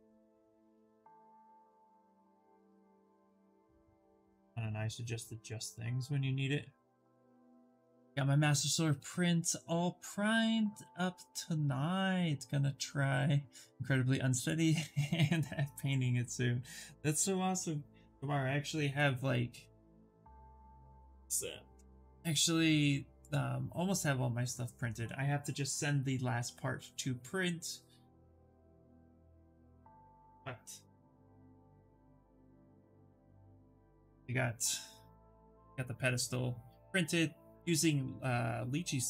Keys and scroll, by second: 4.9 ctrl+z.